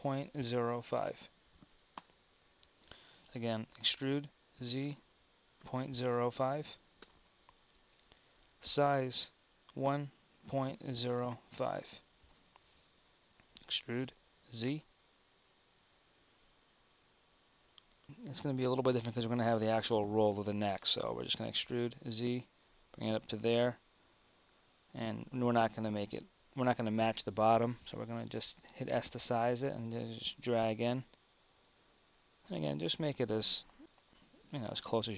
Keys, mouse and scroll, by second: 3.8 e, 8.6 s, 13.6 e, 21.4 e, 24.4-28.1 drag, 28.1 s, 33.4-35.1 drag.